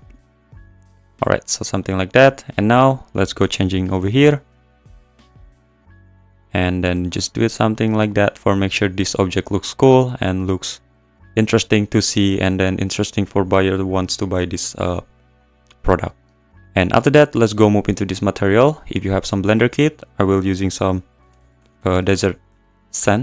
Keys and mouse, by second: 0.7 click, 4.0-5.6 r, 6.1 `, 6.9-9.1 r, 18.4 click, 19.3-23.0 drag.